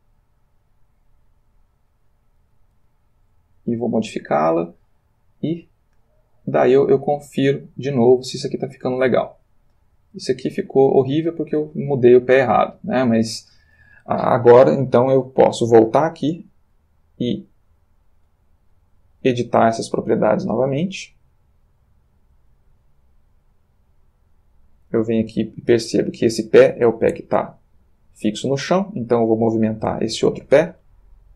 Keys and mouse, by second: 1.2 click, 2.1 click, 2.8 r, 4.0 click, 5.6 click, 15.6 click, 18.8 middle click, 19.4 click, 19.7 click, 20.8 click, 23.0 x, 23.6 click, 24.5-26.3 drag, 28.2 click, 30.7 Right.